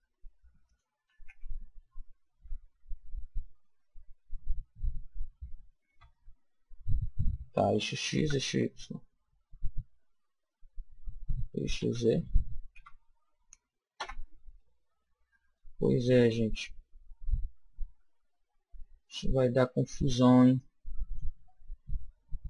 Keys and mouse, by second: 0.7 click, 1.3 g, 2.3 g, 14.0 KP_1, 15.6-17.4 middle drag, 20.5 click.